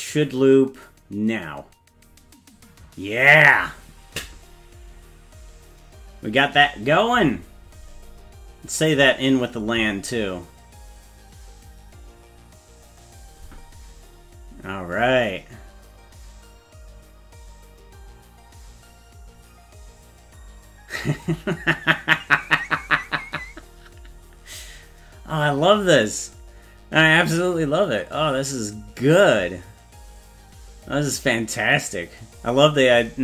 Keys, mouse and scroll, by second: 8.8 click.